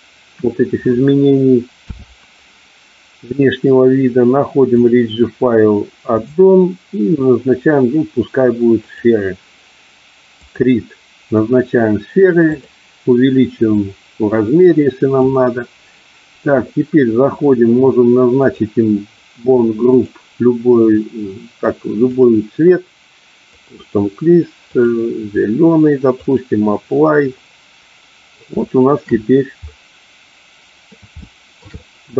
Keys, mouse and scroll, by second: 4.9 click, 6.4-9.3 drag, 10.4 click, 12.8 click, 13.8-15.4 drag, 22.3-23.8 drag, 24.9 click, 26.4 click, 28.7-29.1 shift+middle drag, 29.8-30.9 middle drag, 31.4-31.8 shift+middle drag, 31.9-32.1 middle drag.